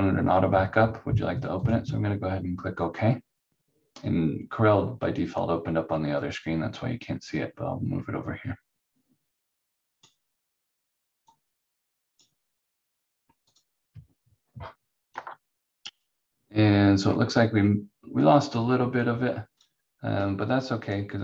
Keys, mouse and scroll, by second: 1.5 click, 6.1 click, 15.1 F4, 15.9 click, 16.5-18.1 scroll up 1, 18.3 click.